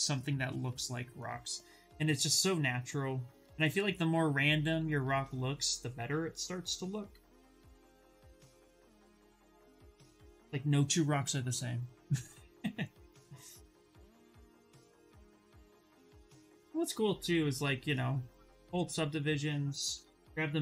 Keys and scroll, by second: 3.9 s, 5.8 s, 7.8 z, 8.5 ctrl+z, 18.4 shift+d, 19.5 b, 20.2 s.